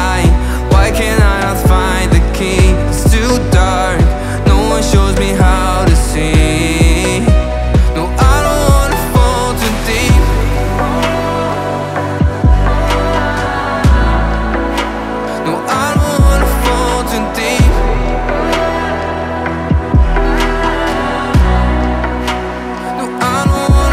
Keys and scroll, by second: 0.1 ctrl+c, 1.4 ctrl+v, 2.1-3.0 typing, 3.2 Escape, 4.0 Delete, 7.8 space, 8.4 o, 9.8 5, 10.0 Return, 16.2 1, 16.4 ., 16.4 5, 16.6 Return, 18.9 ctrl+c, 20.2 ctrl+v.